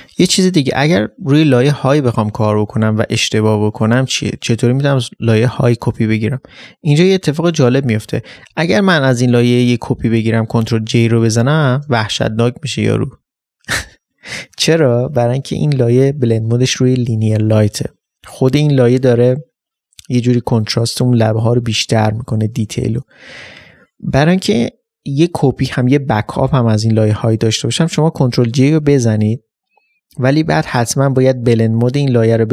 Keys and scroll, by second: 7.7 ctrl+space, 9.6 ctrl+space.